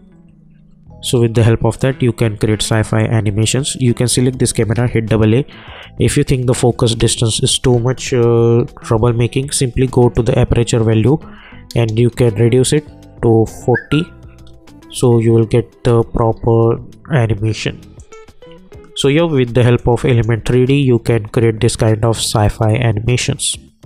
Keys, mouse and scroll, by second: 1.2 `, 3.5 click, 4.5 a, 4.7 a, 8.5 j, 10.1 click, 12.1 Return, 14.8 k, 17.1 `, 18.0 click, 18.5 u, 19.1 u, 19.7 click, 20.3 space.